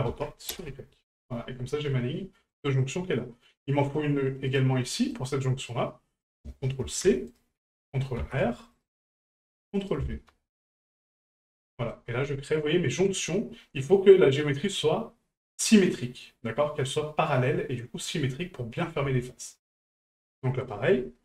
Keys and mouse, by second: 2.5 right click, 4.5 right click, 4.8 middle click, 6.2-7.4 ctrl+drag, 9.9-11.1 ctrl+drag, 11.7 middle drag, 13.8 middle click, 18.6 middle drag, 19.3 shift+middle drag, 19.7 middle click, 20.6 right click.